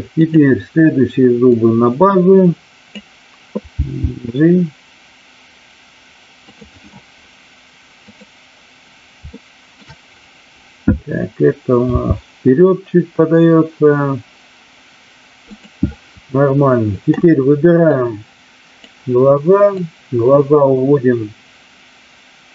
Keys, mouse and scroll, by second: 0.2-0.7 drag, 1.4-3.0 drag, 3.7 g, 9.2-9.8 shift+middle drag, 12.0 g, 15.4 click, 17.8-18.8 drag, 19.7-22.5 drag.